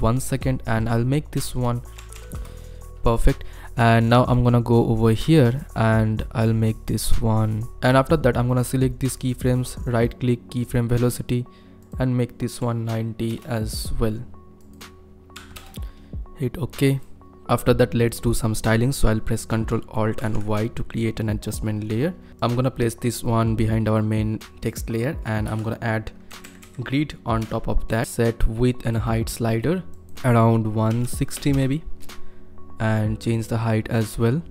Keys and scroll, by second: 1.9 KP_1, 2.0 KP_6, 2.1 KP_5, 2.3 Return, 12.7 KP_9, 13.3 KP_0, 15.3 KP_9, 15.5 KP_0, 20.2 ctrl+alt+y, 25.5 ctrl+space, 26.0-27.1 typing, 27.4 Return, 30.9 KP_1, 31.3 KP_0, 31.5 Return.